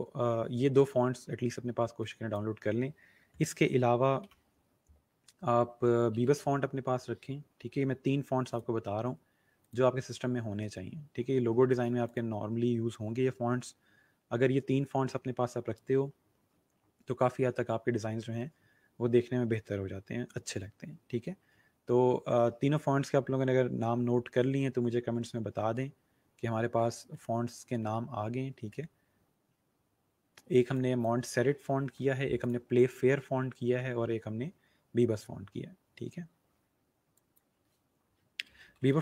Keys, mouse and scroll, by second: 1.9 click, 5.8-6.8 typing, 8.4 click, 10.0 scroll down 1, 10.8 scroll up 1, 11.6 click, 21.0-22.8 scroll up 1, 30.6 click, 37.1 click, 38.2-39.0 typing.